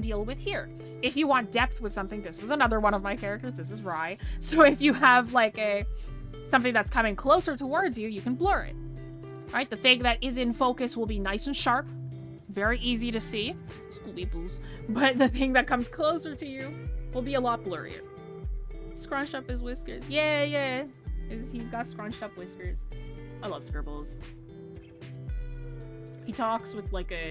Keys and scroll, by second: 8.2 ctrl+z.